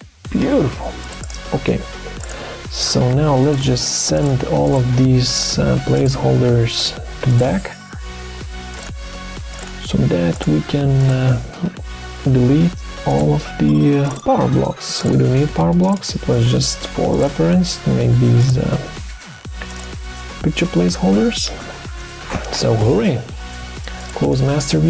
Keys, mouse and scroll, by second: 3.5 shift+click, 4.1 shift+click, 4.7 shift+click, 5.4 shift+click, 5.9 shift+click, 6.8 shift+click, 7.4 shift+click, 12.2 Delete, 13.5 Delete, 14.5 Delete, 15.4 Delete, 16.2 Delete, 17.5 Delete, 18.9 Delete, 20.3 Delete.